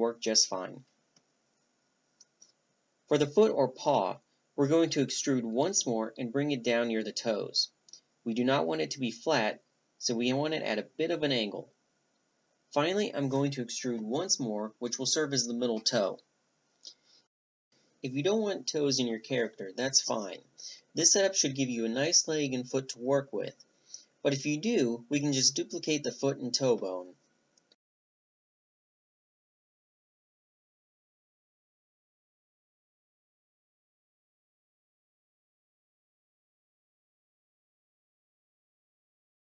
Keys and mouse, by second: 2.3-3.0 middle drag, 4.1 click, 4.2 e, 7.0-13.0 right drag, 13.0 e, 13.6 middle click, 16.9-18.2 middle drag, 18.2-18.8 right drag, 19.9 click, 20.1-21.7 middle drag, 21.7-22.6 drag, 22.6-23.7 right drag, 23.7 a, 24.6 a, 25.0-28.1 middle drag, 31.6 z, 32.2 click, 32.6 middle click, 33.4 click, 34.1-35.6 middle drag, 35.6 click, 37.0 click, 37.2-38.4 right drag, 38.4 shift+d.